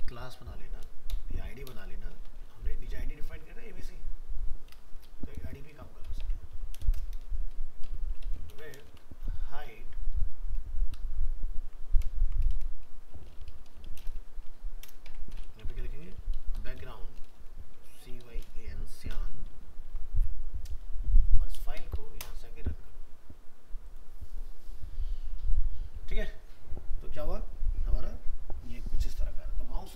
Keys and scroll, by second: 8.5 ctrl+c, 8.8 ctrl+Return, 12.1 shift+Left, 19.5 ctrl+s.